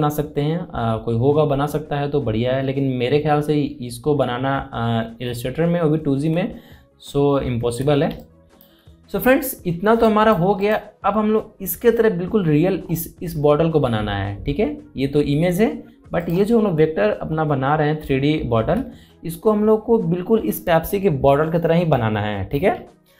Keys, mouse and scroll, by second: 6.7 alt+Num_Lock, 6.7-7.4 scroll down 3, 7.4-8.1 scroll up 1, 8.3 alt+scroll down 1, 8.8 space, 8.9 click, 9.4 space, 10.8 click, 12.5 alt+scroll up 1, 14.2-14.7 scroll up 1, 14.7 scroll down 1, 16.9 click, 18.2-18.6 scroll up 1, 18.6 scroll down 1, 19.3-20.1 alt+scroll down 1.